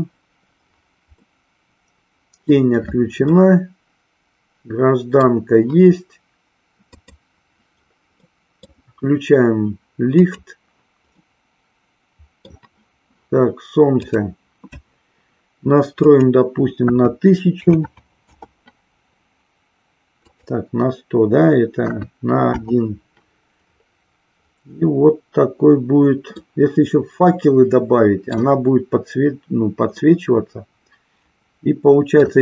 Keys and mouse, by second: 1.4-2.7 middle drag, 3.3-5.3 middle drag, 8.3 middle click, 11.3-12.6 middle drag, 13.9 click, 16.1-18.7 drag, 17.8 KP_0, 20.3-22.7 drag, 26.7-28.8 middle drag, 30.2-32.3 middle drag.